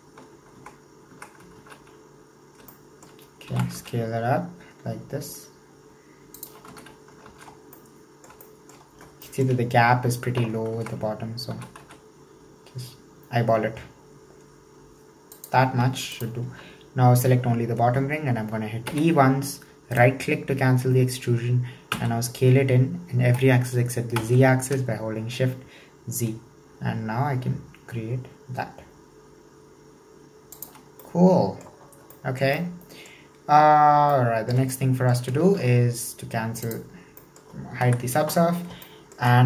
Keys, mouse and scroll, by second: 0.7 Tab, 1.1 Tab, 1.6 alt+z, 2.3-2.8 scroll up 1, 2.8-3.5 shift+middle drag, 3.5 s, 6.7 Tab, 7.3 alt+z, 7.6 scroll down 1, 7.8-9.0 middle drag, 9.0 scroll up 1, 9.2-10.8 shift+middle drag, 10.8 Tab, 11.5 s, 16.2 alt+right click, 18.9 e, 30.9 scroll down 1, 31.0 middle click, 32.0 scroll down 1, 32.2-33.6 shift+middle drag, 33.6-34.1 scroll up 2, 34.1-35.5 shift+middle drag, 35.5 alt+z, 36.7 click, 37.3 middle click, 37.9 KP_1, 38.5-38.9 scroll up 1, 38.9-39.4 shift+middle drag.